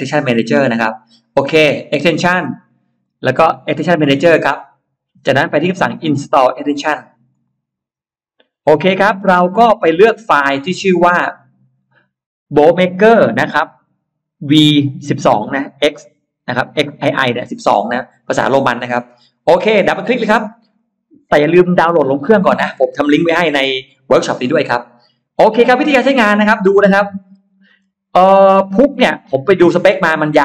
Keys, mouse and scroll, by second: 2.3 click, 2.9 click, 3.6 click, 7.1 click, 9.5 click, 20.4 click, 20.6 click, 26.6 click, 27.1-27.7 scroll down 2, 27.9-28.9 scroll up 2, 29.0 middle click, 29.5-29.9 scroll down 2, 30.0-30.4 scroll up 4.